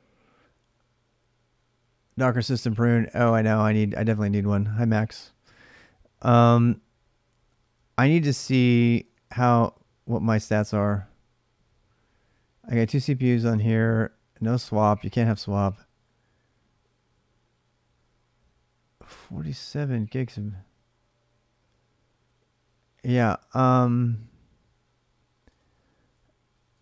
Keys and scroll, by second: 8.3-9.1 typing, 25.3-26.8 typing.